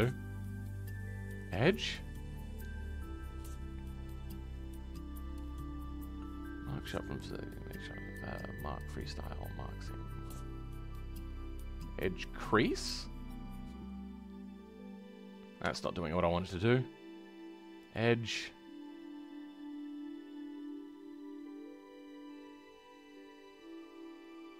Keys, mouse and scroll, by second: 12.7-24.5 drag.